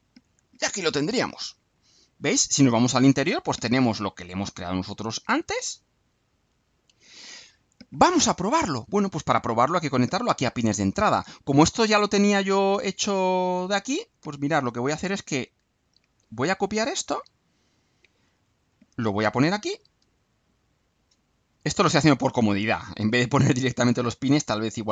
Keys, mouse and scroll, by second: 1.6 click, 5.9 click, 11.8 click, 13.8-15.5 drag, 15.9 ctrl+c, 17.1 click, 18.3 click, 18.7 click, 19.3 ctrl+v, 20.5-21.7 drag, 21.9 click, 24.2-24.9 drag.